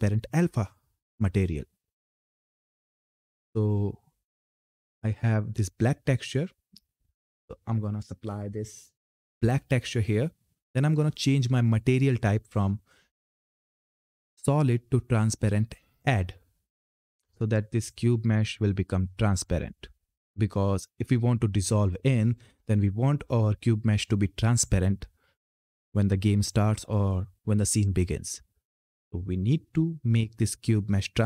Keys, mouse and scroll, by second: 6.6 click, 11.0 click, 15.7 click.